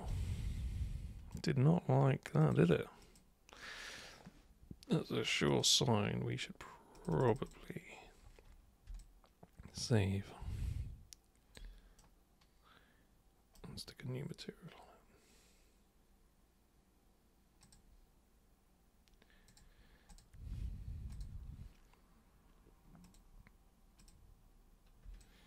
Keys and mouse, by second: 0.1-1.3 super+right drag, 2.4 super+click, 3.0 click, 5.5 click, 6.9 click, 7.1 click, 7.4 click, 9.0-11.5 alt+super+drag, 11.9-13.5 super+right drag, 17.6 super+click, 19.5 super+click, 20.1 super+click, 21.1 super+click, 23.0 super+click, 24.0 super+click, 25.2-25.4 alt+super+drag.